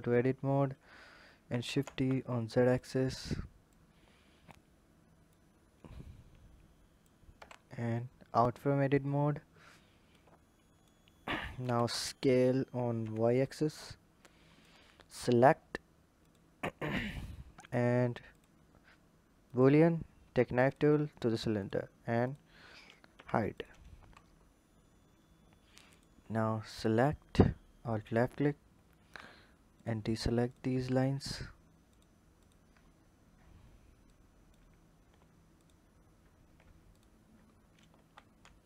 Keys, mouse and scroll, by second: 3.5-5.2 drag, 7.6-8.6 scroll down 5, 8.7 click, 9.1-9.7 scroll down 4, 9.9 click, 11.0-11.4 scroll up 3, 11.4 s, 14.0 click, 14.8 click, 16.0-17.3 drag, 17.3-18.1 scroll down 1, 18.1-19.4 drag, 21.4-22.0 drag, 22.8 h, 23.3 click, 23.8 Tab, 24.2-25.7 scroll up 4, 25.7 click, 26.5 alt+click, 27.8 alt+shift+click, 29.5 shift+click, 30.3 shift+click, 30.7-31.1 scroll down 2, 31.7 shift+click, 32.2 shift+click, 32.6-33.9 scroll up 1, 33.9 click, 34.6-35.4 scroll up 2, 35.4 alt+shift+click, 36.7 alt+shift+click, 37.3-37.7 scroll down 2, 37.7 ctrl+z, 38.3 ctrl+z.